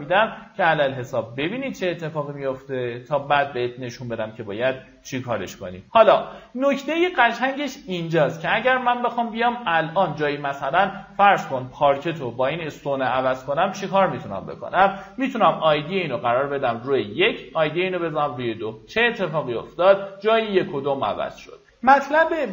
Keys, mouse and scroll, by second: 0.6 right click, 1.2 middle click, 1.8 click, 3.3 middle click, 3.8 click, 5.0 right click, 6.5 middle click, 8.5-12.8 drag, 16.0 KP_1, 17.3 click, 17.8 KP_2, 21.9 click.